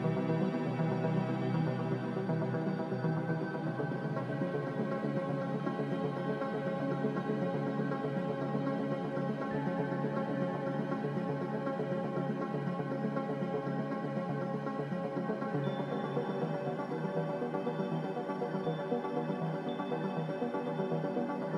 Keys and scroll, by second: 2.8 Delete.